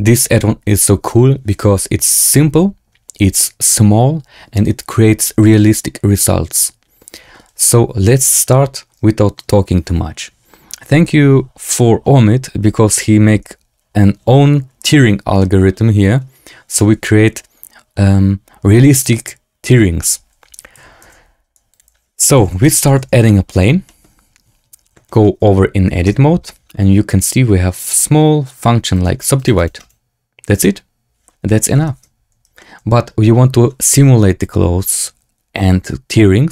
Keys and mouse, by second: 15.3-15.6 drag, 20.7 shift+c, 20.9 shift+a, 22.2 r, 22.8 KP_1, 22.9 KP_Decimal, 23.8 shift+drag, 25.0 shift+drag, 26.0 Tab, 28.8 click, 29.3 click, 29.6 click, 31.9 Tab, 32.5-33.1 drag.